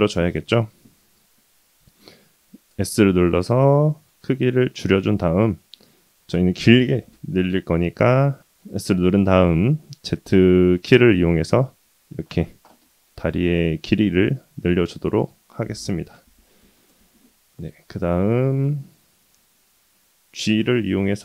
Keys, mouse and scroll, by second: 0.7-1.4 scroll down 1, 1.4-2.7 scroll down 1, 2.7 s, 12.5-12.8 scroll down 2, 12.8-14.6 middle drag, 16.8 KP_1, 17.9-19.4 scroll up 5, 19.4 g.